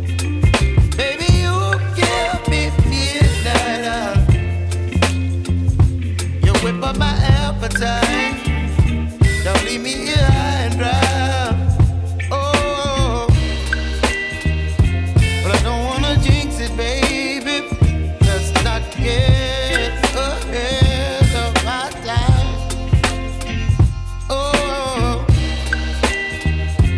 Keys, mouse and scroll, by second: 1.1 ctrl+shift+a, 7.3 click, 16.2 click, 21.3 ctrl+0, 26.8 click.